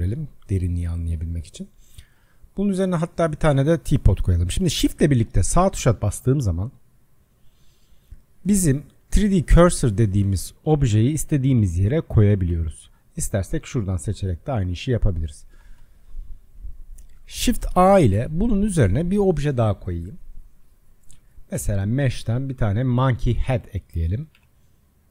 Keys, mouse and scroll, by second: 5.2 shift+right click, 7.1-13.7 shift+right drag, 13.7 click, 14.9 click, 15.8-17.0 shift+right drag, 17.0 click, 17.7 shift+a, 24.4 s.